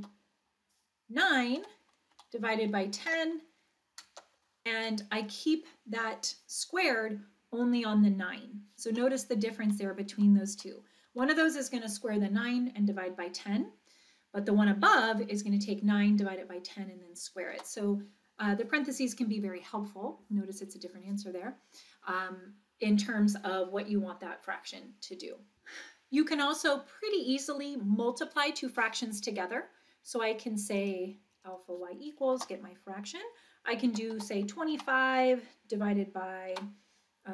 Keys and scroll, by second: 0.0 Return, 1.6 9, 2.2 Down, 3.0 1, 4.1 0, 4.8 Up, 9.6 Right, 10.1 Right, 10.5 Right, 11.1 Right, 11.3 Right, 17.5 Return, 32.3 Return, 33.9 2, 34.1 5, 34.8 Down, 36.5 3.